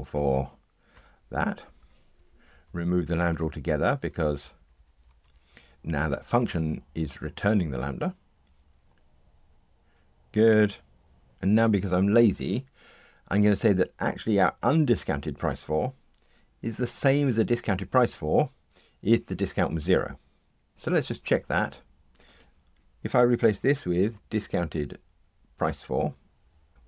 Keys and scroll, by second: 1.6 Delete, 4.4 alt+shift+Right, 6.3 Delete, 8.3 ctrl+r, 26.7 Return.